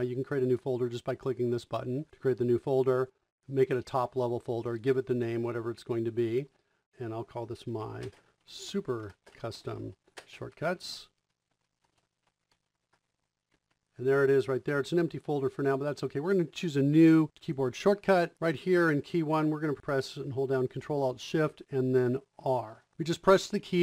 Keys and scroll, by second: 7.7-9.0 typing, 12.5-13.8 typing, 17.9 Return, 22.6 r.